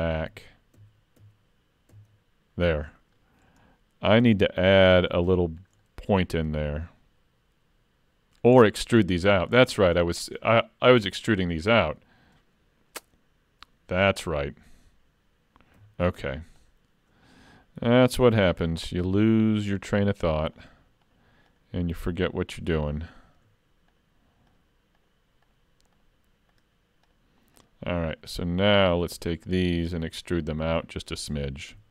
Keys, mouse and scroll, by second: 0.0 ctrl+z, 0.3 ctrl+z, 0.8 ctrl+z, 1.2 ctrl+z, 1.9 ctrl+z, 2.8-4.4 scroll up 4, 3.1 middle click, 4.4 middle click, 4.4-4.9 scroll up 1, 5.4 shift+middle click, 5.8 middle click, 8.5-9.1 scroll down 5, 9.1 middle click, 9.5-9.9 scroll down 2, 10.0 shift+middle click, 10.4 scroll up 2, 11.0 middle click, 15.7 3, 16.6 alt+click, 18.7 alt+shift+click, 30.0 middle click, 31.7 e.